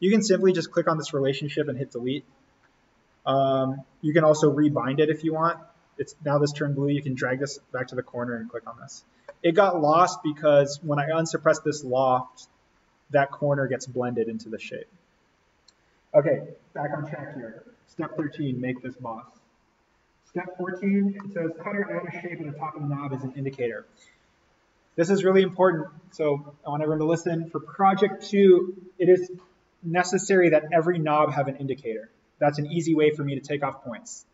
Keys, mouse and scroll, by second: 0.5 click, 1.6 Delete, 2.1 click, 2.4-2.8 scroll up 1, 3.4-5.0 scroll down 1, 5.4-8.1 drag, 8.1-9.8 scroll up 1, 9.8 click, 12.5-14.2 scroll up 1, 14.2-14.8 scroll down 1, 14.8-15.9 scroll up 1, 18.1 middle click, 18.2 scroll, 21.1 middle click, 21.2 scroll.